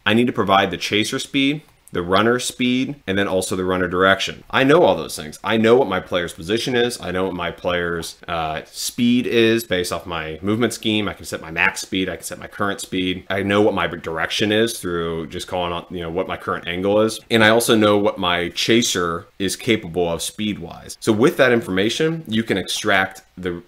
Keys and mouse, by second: 1.7 click, 3.2 click.